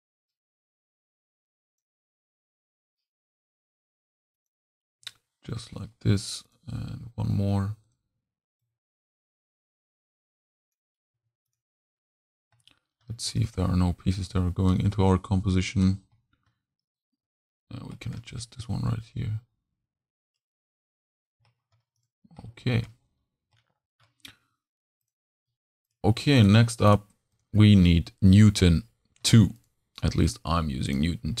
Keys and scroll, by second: 11.1 v.